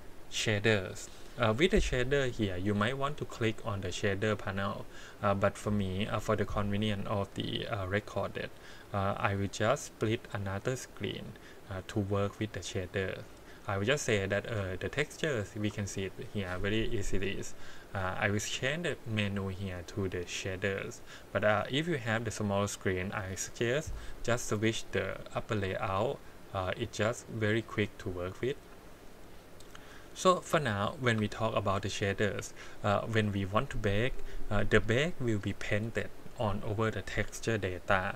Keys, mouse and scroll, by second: 8.7 click, 11.9-13.2 drag, 13.7-14.2 scroll down 3, 14.2-14.6 scroll up 1, 14.7 shift+middle click, 18.1-20.9 drag, 22.8-23.9 drag, 28.0-28.9 drag, 29.7 middle click, 30.1-30.5 scroll up 2, 30.6-31.1 shift+middle drag.